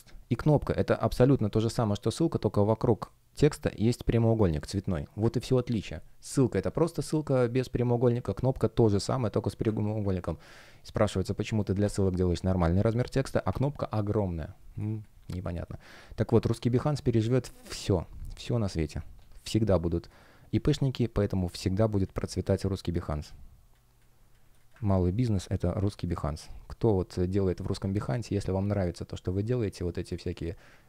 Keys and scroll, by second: 14.7 space, 17.6 alt+l, 19.7 space, 24.7 super+w.